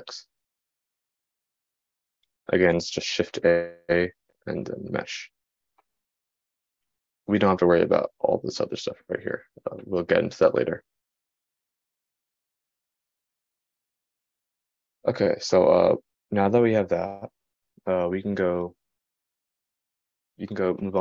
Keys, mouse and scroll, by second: 10.8 shift+a.